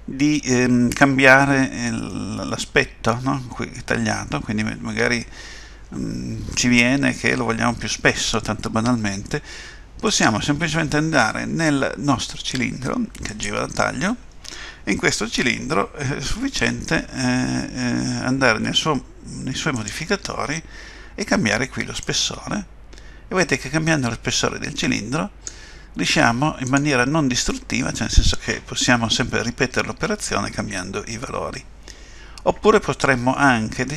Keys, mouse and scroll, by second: 0.4 middle click, 2.1 middle click, 10.0 click, 13.3 click, 19.7 click, 22.1 click, 26.6 click, 27.5 middle click.